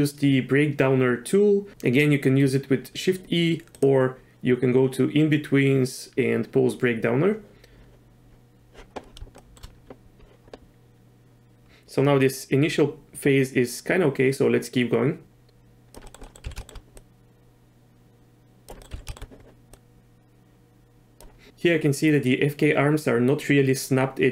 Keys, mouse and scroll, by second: 3.7-7.5 drag, 9.4 shift+drag, 9.5 shift+middle click, 13.7-15.9 drag, 16.0 middle click, 16.2 middle click, 16.4 z, 16.6 shift+middle click, 16.9-18.7 drag, 18.8 middle drag, 18.9 z, 19.1 shift+middle click, 19.7 click.